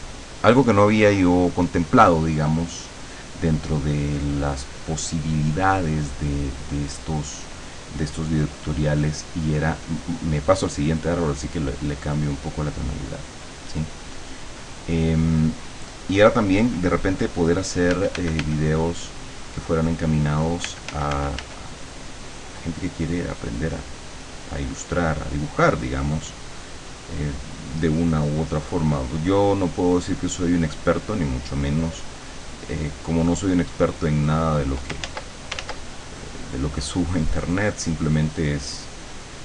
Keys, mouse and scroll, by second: 9.7 click, 11.1-12.7 drag, 13.5 click, 18.0 f, 20.3 click, 20.7 f, 21.8 click, 28.0-34.7 drag, 35.1 ctrl+z, 36.0-39.4 ctrl+drag.